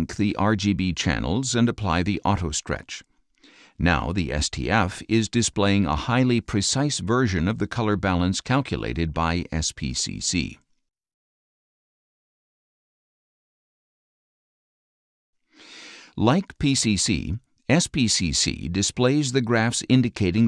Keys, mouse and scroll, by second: 2.6 click, 8.0 click, 9.5-10.0 scroll down 4, 11.0-12.1 middle drag, 12.1 click, 12.8 middle click, 13.5 click, 13.7-16.0 middle drag, 16.6-17.1 scroll up 3, 19.2-19.7 drag.